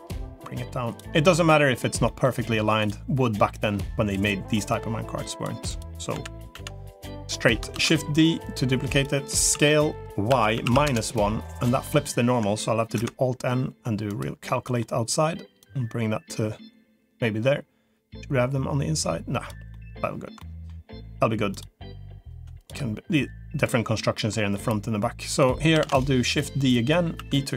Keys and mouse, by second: 0.3 click, 1.3 middle click, 1.9 middle click, 3.5 click, 4.7 click, 6.1 l, 6.5 l, 6.9 middle click, 7.7 shift+d, 8.3 click, 9.5 s, 11.5 middle click, 12.9 alt+n, 14.5 middle click, 15.5-19.3 drag, 19.7 middle click, 20.3 middle click, 20.9 middle click, 21.3 click, 23.1-24.1 drag, 24.1 middle click, 25.7 shift+d, 26.3 click, 27.1 e.